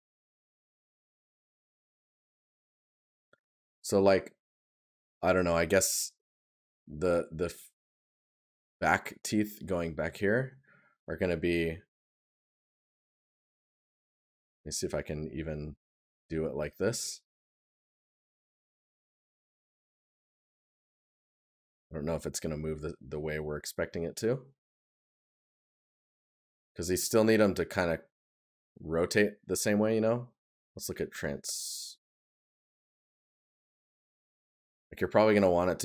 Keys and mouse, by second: 0.3 right click, 7.4 right click, 10.0 right click, 16.7 right click, 18.8 right click, 25.8 right click, 31.3 right click.